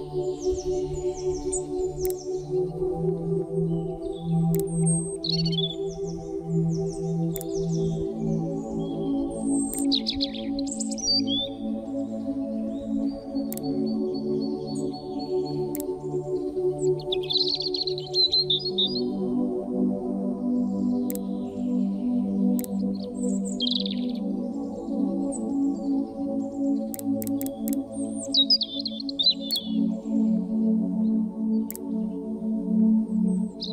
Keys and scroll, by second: 12.4 a, 17.2 Down, 20.2 v.